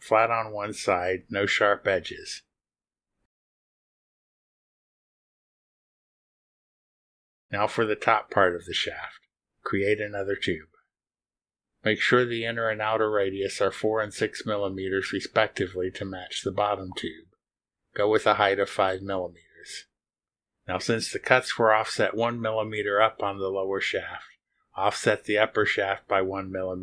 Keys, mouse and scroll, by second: 0.9 click, 1.9 click, 2.2 space, 3.1 click, 3.3 space, 4.0 middle click, 4.1 click, 4.6 middle click, 4.9 scroll down 1, 5.3 click, 5.8 click, 5.9 middle click, 6.3-7.5 scroll down 1, 7.5-8.9 scroll up 2, 12.3 click, 12.8 click, 13.2 scroll down 2, 15.6 click, 17.5 click, 18.3 4, 18.7 click, 19.7 6, 20.7 click, 21.5 5, 22.7 click, 25.9 scroll down 1.